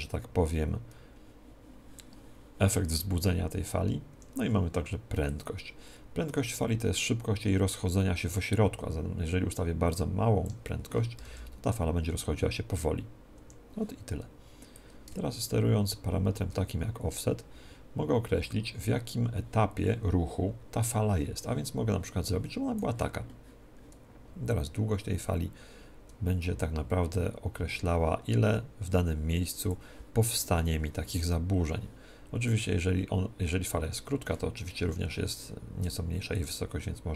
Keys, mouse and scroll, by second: 4.1 Escape, 5.3-11.2 drag, 11.2 alt+a, 13.3 Escape, 14.7-37.1 drag.